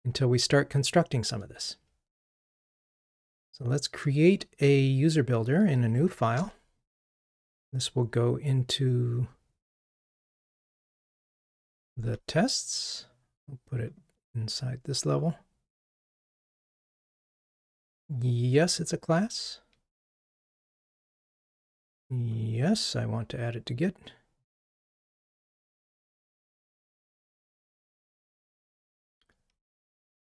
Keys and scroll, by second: 3.3 alt+Return, 28.4 ctrl+Tab.